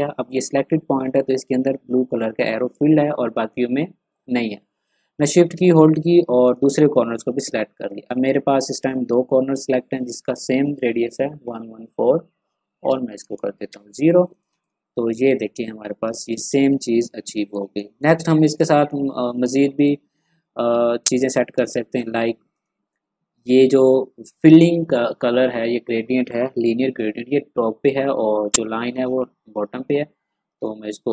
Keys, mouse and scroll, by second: 6.4 shift+click, 13.2 Return, 14.2 click, 15.3 ctrl+scroll down 1, 16.0 ctrl+space, 16.2 click, 16.6 ctrl+scroll up 1, 17.3 ctrl+space, 17.5 click, 17.9 space, 18.0 click, 18.1 space, 18.3 ctrl+scroll up 1, 18.6 ctrl+space, 18.6 click, 21.5 space, 21.6 click, 30.6 click.